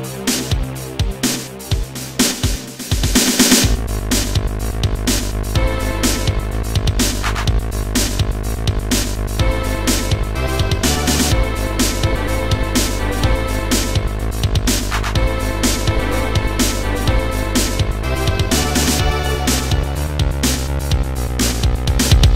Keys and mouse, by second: 2.0 click, 2.7 shift+click, 3.6 click, 4.5 click, 4.9 click, 6.2 click, 10.2 shift+click, 11.0 click, 12.4 click, 13.5 click, 14.1 Delete, 15.9 Delete, 15.9 click, 16.3 Delete, 20.4 Delete, 20.4 click, 20.6 right click, 21.7 click.